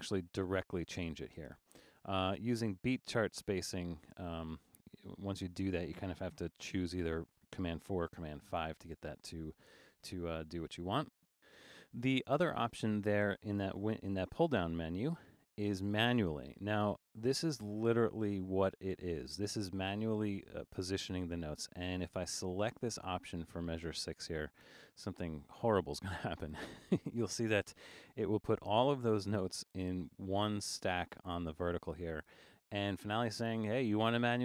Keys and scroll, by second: 5.7 super+a, 6.6 super+4, 8.4 super+u, 13.8 Return.